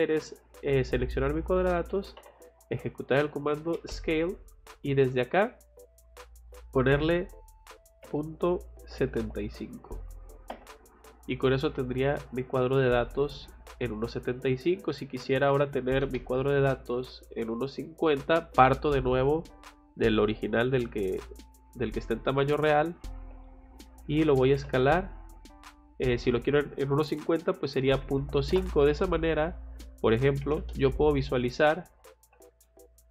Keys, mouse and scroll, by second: 1.8 s, 2.2 c, 3.7 space, 6.1 click, 13.0 middle click, 14.5 click, 14.7 click, 15.4 c, 15.9 o, 16.0 space, 16.4 click, 22.7 click, 23.3 click, 23.6 click, 24.1-25.0 typing, 25.5 click, 28.9 Escape, 29.4 click, 29.6 click, 30.4 m, 30.6 space, 30.7 click, 32.2 F8, 32.6 middle click.